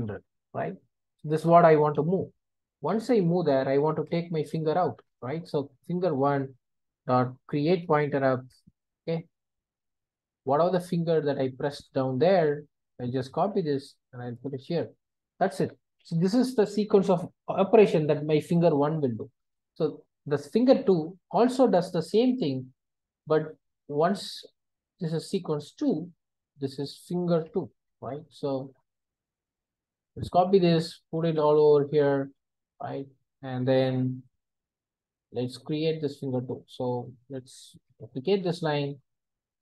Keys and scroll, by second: 5.0 Return, 13.5 super+c, 14.4 super+v, 20.7 super+c, 22.6 super+v, 29.8 super+c, 31.0 super+v.